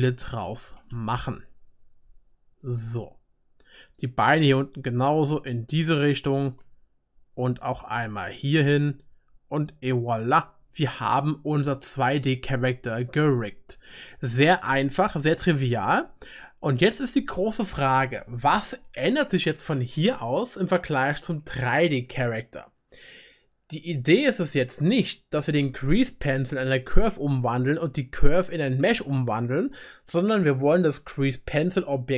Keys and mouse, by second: 0.7 e, 0.7-6.2 right drag, 4.5 e, 7.5 click, 8.0 e, 8.7-11.3 right drag, 11.3-12.8 drag, 12.8-32.1 right drag.